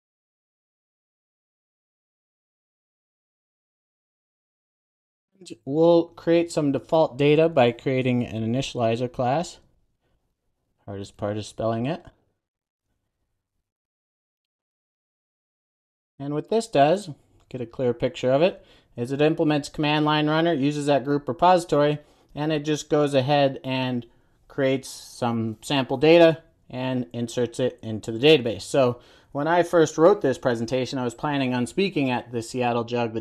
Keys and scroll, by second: 2.4 super+a, 4.3 Return, 5.1 super+s, 8.2 super+n, 13.0 super+a, 14.9 Return, 15.4 super+s.